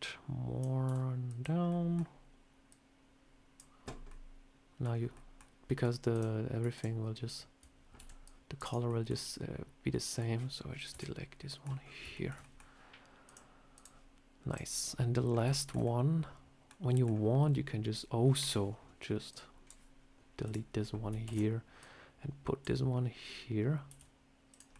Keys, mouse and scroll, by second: 0.7 s, 1.6 middle click, 2.6 click, 3.7-4.2 scroll down 3, 4.0 middle click, 4.7 scroll down 2, 5.0 middle click, 5.6 middle click, 6.0 click, 6.6 shift+click, 7.9 b, 8.5 right click, 9.8 middle click, 10.8 Delete, 11.4 middle click, 11.7 scroll up 4, 12.0 shift+middle click, 12.3 middle click, 13.1 click, 14.4 click, 15.2 scroll up 1, 15.4 shift+middle click, 15.7 middle click, 16.7 scroll down 2, 16.8 middle click, 19.2 click, 20.3 click, 21.1 shift+d, 21.7 click, 23.7 s, 24.6 middle click.